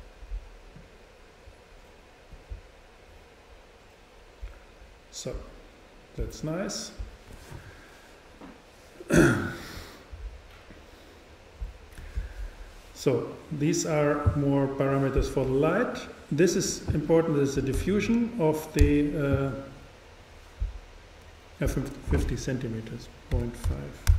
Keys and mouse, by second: 0.8-2.6 drag, 13.5-15.2 drag, 16.4-18.8 drag, 22.4-24.1 drag.